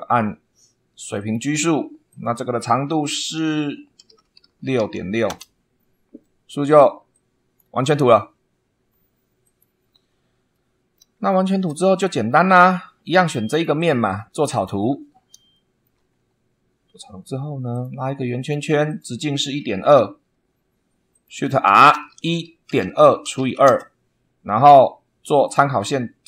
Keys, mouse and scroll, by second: 1.1 click, 2.0 click, 3.9-5.2 typing, 7.0 click, 9.4 click, 10.4 middle click, 11.2 shift+middle click, 11.9 shift+scroll up 1, 13.4 click, 14.5 click, 15.4 shift+right click, 15.8 shift+middle click, 16.2 shift+scroll up 2, 17.6 click, 18.3 click, 18.8 click, 19.5 Escape, 21.0 click, 21.6-23.8 typing, 25.4 click.